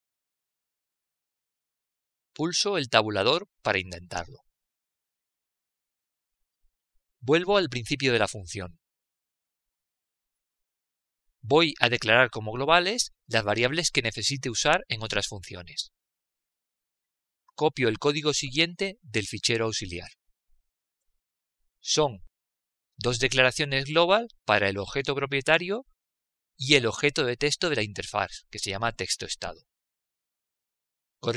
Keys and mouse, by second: 0.5 shift+Up, 5.9 Tab, 5.9-8.8 drag, 13.6 click, 14.6 Return, 21.1 click, 22.3 ctrl+v, 25.2 click, 29.6 click, 31.1 Return.